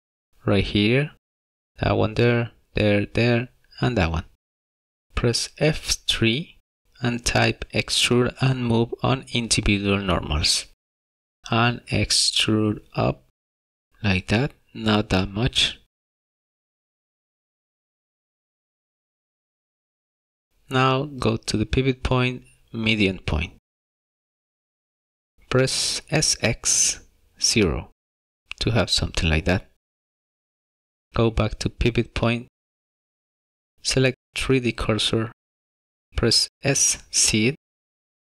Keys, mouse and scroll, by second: 1.8 3, 2.6 click, 3.1 shift+click, 3.3 click, 3.8 click, 3.9 shift+click, 4.6 middle click, 5.1 scroll down 2, 5.7 F3, 22.2 click, 27.1 s, 30.7 shift+middle click, 30.9 middle click, 33.4 click, 36.8 scroll up 2, 37.5 shift+middle click.